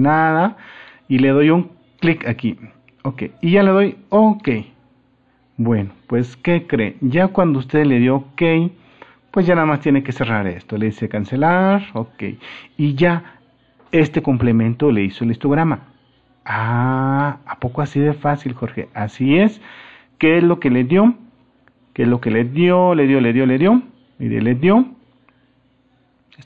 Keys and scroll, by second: 8.9 super+-.